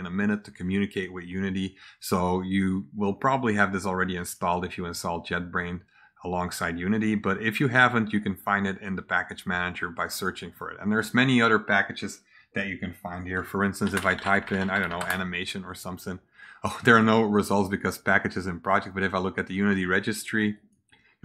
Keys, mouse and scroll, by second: 4.1 click, 10.0 click, 13.5-15.2 typing, 17.6 click, 18.5 click, 20.4 click.